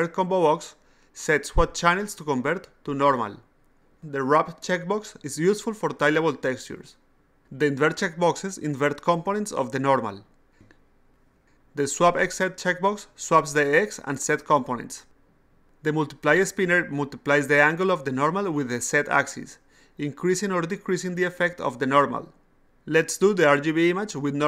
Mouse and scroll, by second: 0.0 click, 0.8 click, 1.7 click, 2.9 click, 4.6 click, 7.3 click, 8.0 click, 8.6 click, 9.5 click, 10.1 click, 10.7 click, 11.3 click, 12.1 click, 14.7 click, 15.9-21.1 drag.